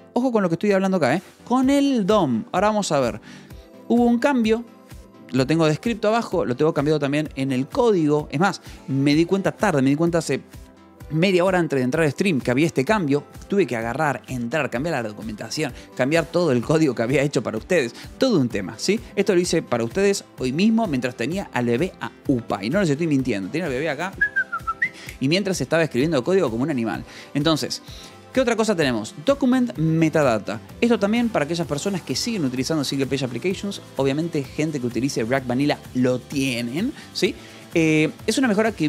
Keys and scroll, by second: 19.6 ctrl+s, 28.6 j, 29.6 shift+v, 31.0 Escape, 38.3 shift+v.